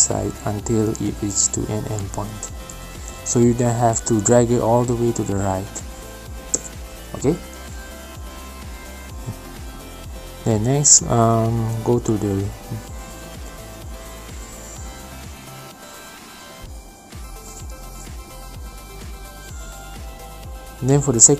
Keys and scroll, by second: 1.4 space, 4.0 space, 7.7 ctrl+z, 8.1 ctrl+z, 12.1 space, 13.9 space.